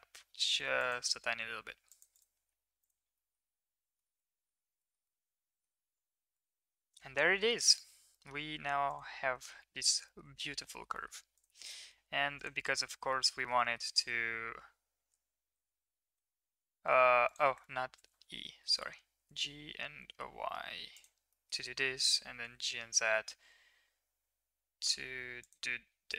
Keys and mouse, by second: 0.1 s, 2.1 right click, 2.3 Tab, 3.1 middle click, 3.9 shift+middle click, 4.1 middle drag, 4.7 shift+middle click, 5.0-5.6 middle drag, 6.3-7.4 middle drag, 8.1 middle drag, 8.8 click, 9.4 shift+middle click, 9.6 middle click, 10.0 shift+middle drag, 10.6 shift+middle click, 10.9 middle click, 11.6 middle click, 11.8 Tab, 12.3 click, 12.8 middle drag, 13.3 shift+middle drag, 13.6 middle drag, 15.1 e, 17.6 ctrl+z, 18.6 g, 21.4 middle click.